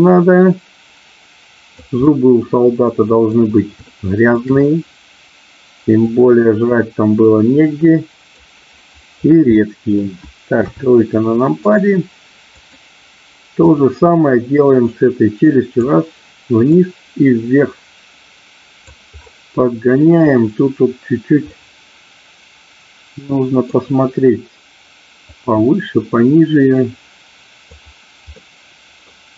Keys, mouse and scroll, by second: 2.1 middle click, 2.7-3.3 scroll up 1, 3.8 shift+middle click, 6.1-8.4 drag, 9.6 middle click, 10.6 KP_3, 11.6-12.7 drag, 13.8-15.7 drag, 16.7-18.8 drag, 21.6-22.8 scroll up 1, 22.8-23.8 middle drag, 25.3-27.7 drag, 28.4 middle click.